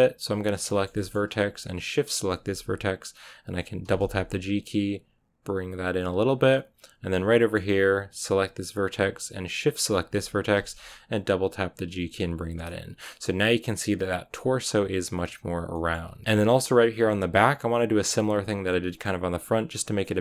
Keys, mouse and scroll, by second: 0.3 right click, 0.6-2.0 shift+middle drag, 2.0-3.7 shift+right drag, 3.8 g, 6.3-8.2 middle drag, 8.2-10.4 right drag, 10.4 g, 12.5-16.0 middle drag, 16.0 scroll up 1, 16.2-20.0 middle drag, 20.0 right click.